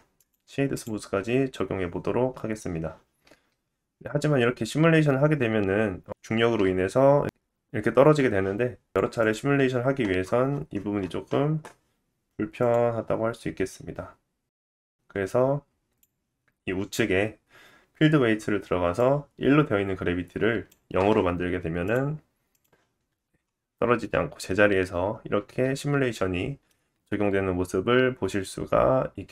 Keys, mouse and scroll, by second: 0.1 right click, 3.2-8.9 drag, 3.2-8.7 middle drag, 3.2-8.7 right drag, 3.2 space, 3.9 space, 4.3-6.6 scroll down 2, 7.6 space, 8.7 space, 9.1 click, 10.1-12.1 scroll down 5, 12.1-12.5 scroll down 2, 12.5-14.3 drag, 13.0-14.1 scroll down 2, 14.1 scroll down 1, 16.3-17.4 scroll down 3, 16.7-18.3 drag, 16.7-18.3 middle drag, 16.7-18.3 right drag, 17.4-18.3 scroll down 1, 18.3-18.9 scroll down 2, 18.9 click, 21.8 click, 23.4 scroll up 2, 23.9 shift+middle click, 25.3 space, 25.7 middle click.